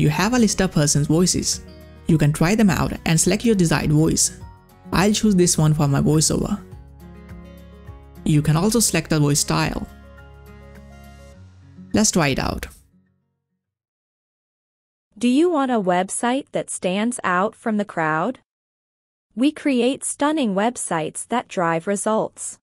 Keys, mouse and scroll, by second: 0.0 click, 0.8-1.5 scroll down 1, 1.5-3.0 scroll down 2, 4.0 scroll down 1, 5.9 click, 7.5 click, 8.4-9.2 scroll down 1, 10.3 click, 12.7 click.